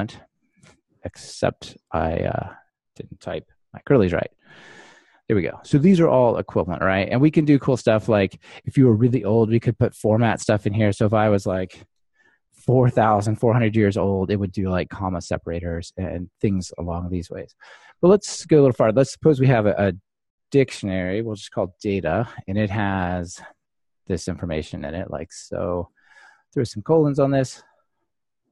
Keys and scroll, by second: 4.4 ctrl+r, 13.7 ctrl+r, 24.0 super+c, 26.2 super+v.